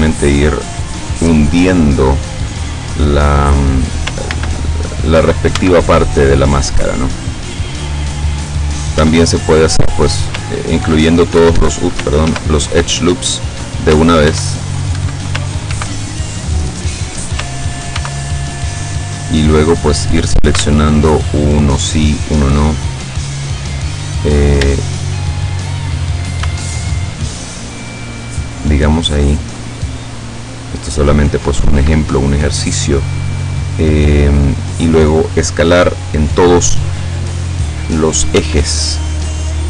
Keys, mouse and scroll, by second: 4.3 ctrl+z, 4.9-5.2 ctrl+scroll up 3, 5.6 Tab, 6.3 click, 6.4 middle click, 7.4 scroll up 2, 7.7-8.9 middle drag, 9.0 Tab, 9.4-10.4 middle drag, 10.9 ctrl+e, 11.4 ctrl+Escape, 12.3 ctrl+r, 12.9 ctrl+click, 13.4 click, 14.3 ctrl+e, 15.4 ctrl+Escape, 15.7 ctrl+r, 16.1 ctrl+click, 16.7 ctrl+click, 18.0 ctrl+r, 18.4 ctrl+click, 18.8 ctrl+click, 20.7 alt+shift+right click, 22.1 alt+shift+right click, 24.8 alt+shift+right click, 25.3 alt+shift+right click, 25.8 shift+right click, 26.9 alt+shift+right click, 28.1 alt+shift+right click, 28.9 alt+shift+right click, 32.9-34.9 middle drag, 38.5 s.